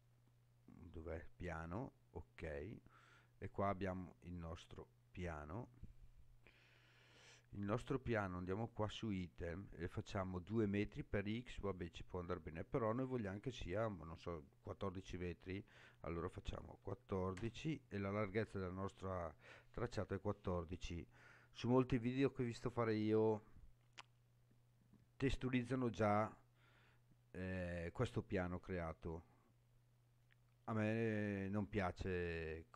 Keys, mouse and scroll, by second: 3.4-5.5 scroll up 5, 5.5-7.0 scroll down 3, 8.7 click, 15.0-18.0 drag, 19.0 scroll up 2.